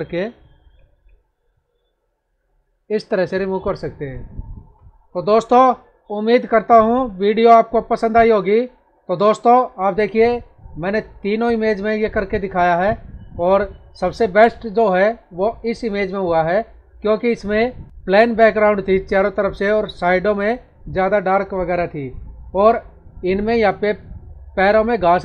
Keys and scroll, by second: 3.2 ctrl+-, 23.7 space.